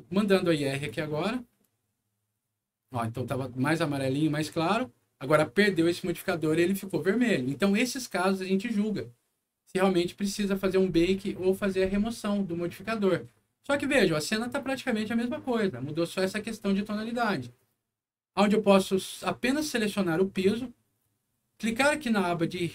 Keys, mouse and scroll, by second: 0.7 click, 14.4 click, 18.3 click, 19.9 click.